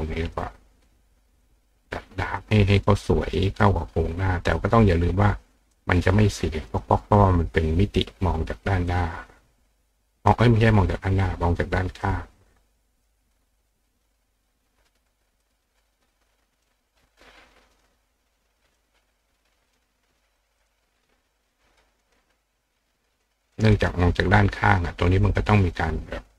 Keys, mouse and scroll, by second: 0.0 click, 0.3 click, 0.7 click, 1.4 click, 2.4 click, 3.6 click, 5.7 click, 6.7 click, 8.9-10.3 drag, 12.0-13.1 drag, 15.4 click, 16.7-17.8 drag, 18.8-19.8 drag, 20.4 click, 20.6 click, 21.5 click, 21.7 click, 22.0 click, 22.6 click, 23.4 click, 23.8 click, 24.0 click, 25.3 click, 26.1 click.